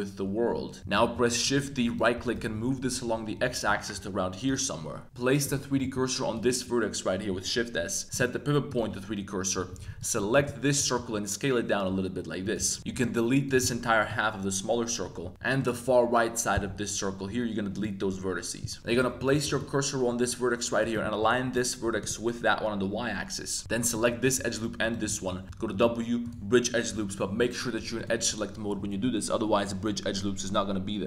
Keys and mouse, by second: 0.9 shift+d, 1.8 click, 2.1 g, 2.3 x, 4.4 click, 5.4 click, 5.8 shift+s, 8.2 click, 9.5-10.9 typing, 12.4 click, 12.5 g, 12.8 a, 12.9 b, 13.6 x, 15.0 a, 15.2 a, 15.3 shift+x, 18.8 y, 18.9 click, 19.3 shift+s, 20.8 click, 21.2 s, 21.4 y, 21.8 0, 22.0 click, 23.6 alt+2, 23.8 alt+click, 24.8 alt+shift+click, 25.4 w, 28.0 click.